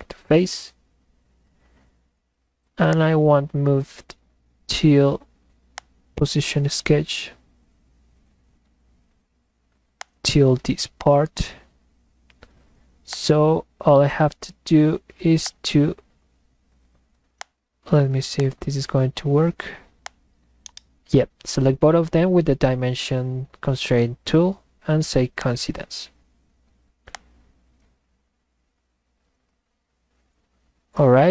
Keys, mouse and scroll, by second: 2.9 click, 5.7 click, 10.0 click, 13.1-13.9 drag, 15.5 click, 17.4 click, 18.4 click, 20.1 click, 20.7 right click, 25.4 click, 27.1 click.